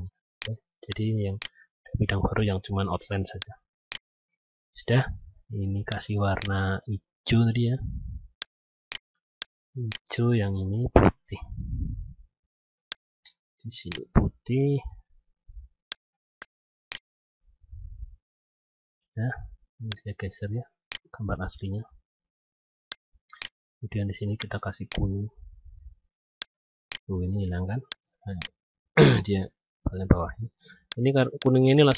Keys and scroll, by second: 2.6 ctrl+z.